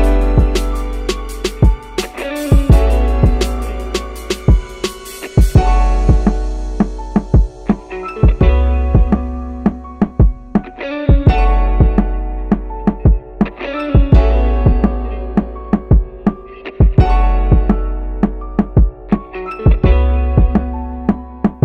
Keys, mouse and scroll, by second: 0.9 scroll down 1, 1.7-3.0 drag, 3.6 click, 4.6-5.5 drag, 5.9-7.1 middle drag, 7.4-8.1 shift+middle drag, 8.4-8.8 shift+middle drag, 10.0-11.9 drag, 14.8 click, 15.1-15.9 drag, 16.9 s, 18.2 click, 20.1-21.6 drag.